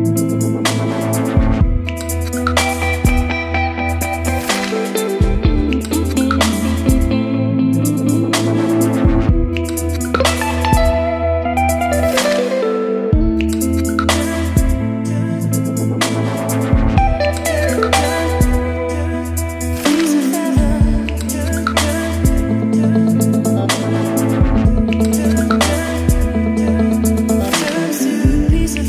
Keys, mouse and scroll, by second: 0.0-12.1 typing, 2.5 Return, 9.4 click, 11.1 click, 12.5 Left, 12.6 Return, 13.2-22.5 typing, 22.8 click, 23.6 Return, 24.2-28.8 typing, 27.3 click.